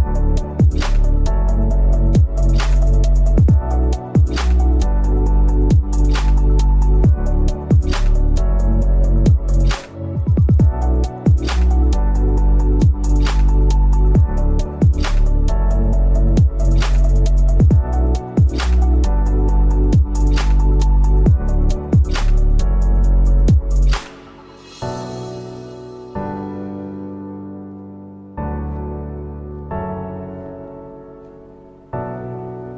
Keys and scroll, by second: 0.0 a, 0.4 v, 0.8 p, 4.4 v, 4.5 a, 7.7 v, 8.3 m, 9.1 Delete, 9.2 v, 12.5 p, 13.3 v, 13.8 p, 13.9 v, 14.2 Delete, 18.3 p, 19.2 ctrl+z, 22.8 v, 23.1 a, 23.8 v, 24.1 p, 28.4 v, 28.5 a, 30.2 v, 31.6 p, 32.3 v.